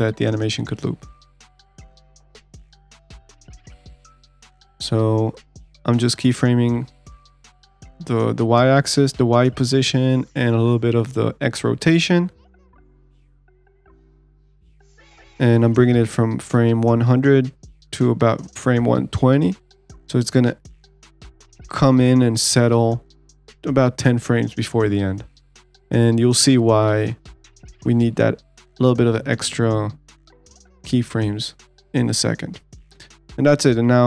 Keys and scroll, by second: 32.5 ctrl+s.